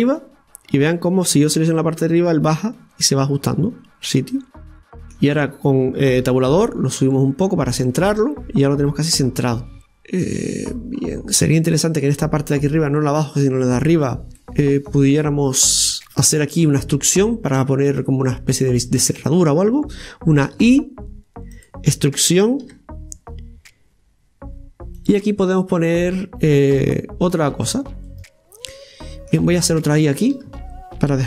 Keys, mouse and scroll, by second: 0.0-1.8 middle drag, 1.8-4.3 drag, 4.3-6.2 middle drag, 6.2 Tab, 7.0 click, 7.9-9.8 middle drag, 9.4-9.8 scroll, 10.7-11.4 scroll up 5, 12.1-14.3 middle drag, 14.3 scroll up 2, 14.4-17.4 middle drag, 17.9 click, 18.9-20.5 right drag, 25.3-28.1 middle drag, 28.1 right click, 28.7-29.7 middle drag, 29.7-31.2 right drag.